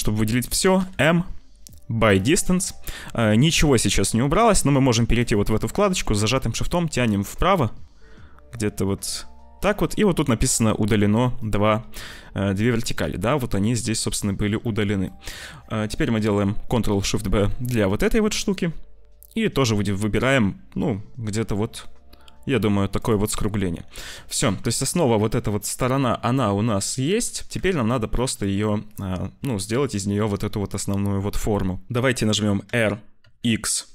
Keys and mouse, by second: 0.7 m, 5.0 click, 6.6-9.5 shift+middle drag, 12.0 shift+middle click, 14.6 shift+middle click, 15.0 click, 17.2 ctrl+shift+b, 24.0 shift+middle click, 27.5 Tab, 28.4 middle click, 31.9 ctrl+shift+F1, 32.5 r.